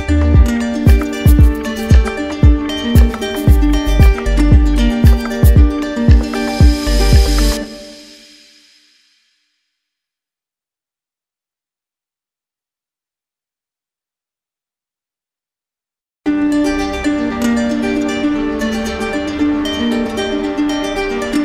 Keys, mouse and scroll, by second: 1.2 alt+right click, 1.7 right click, 5.9 click, 7.0 alt+right click, 9.2 right click, 9.9 shift+right click, 10.8 alt+right click, 12.1 alt+right click, 13.6 d, 13.7 d, 14.9 right click, 17.3 click, 17.9 click, 18.7-20.2 right drag.